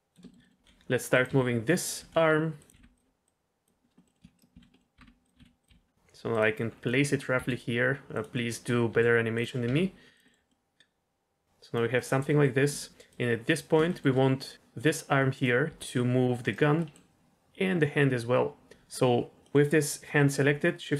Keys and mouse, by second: 0.2 shift+middle click, 0.4 middle click, 0.5-2.9 typing, 1.8 click, 3.2-3.6 drag, 3.9 middle click, 4.1 middle click, 4.3 shift+right click, 4.5-5.7 typing, 4.7 middle click, 6.9 click, 7.3 g, 8.1 click, 8.9 g, 9.3 click, 9.6 r, 10.3 middle drag, 10.5 middle drag, 10.8-11.7 drag, 11.9 middle click, 12.2 middle click, 13.1 click, 13.8 shift+middle drag, 14.4 middle click, 14.7 click, 15.6 g, 16.7 middle click, 18.7 ctrl+z, 19.4 middle click.